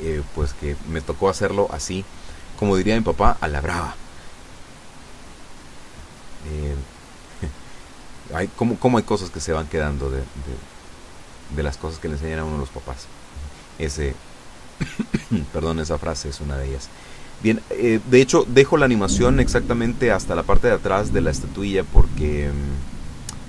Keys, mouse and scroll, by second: 4.0 g, 5.2 click, 5.9 g, 7.4 click, 8.1 r, 10.8 click, 11.5 g, 12.9 click, 13.6 r, 15.7 click, 16.2 g, 17.6 click, 18.3 g, 19.6 click, 20.0 r, 21.4 click, 22.1 g, 22.3 middle click.